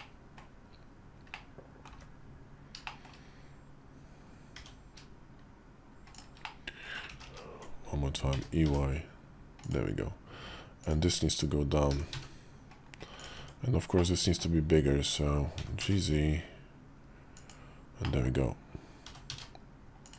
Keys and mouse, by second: 1.2 click, 1.8 `, 2.7 shift+click, 4.3 g, 6.3 middle click, 6.9 ctrl+z, 7.0 ctrl+z, 8.1 e, 10.6 click, 11.7 e, 13.1 Tab, 13.8 middle click, 15.3 g, 17.9 middle click, 18.8 g.